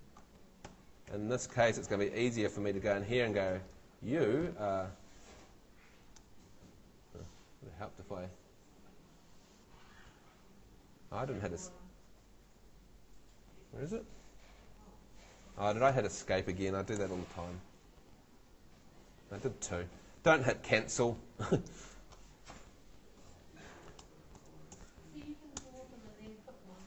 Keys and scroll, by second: 0.7 F2, 1.1 F3, 1.8 Escape, 15.8 Escape, 16.8 super+Escape, 16.9 super+l, 24.7 shift+super+v, 25.4 super+v, 25.6 super+Return.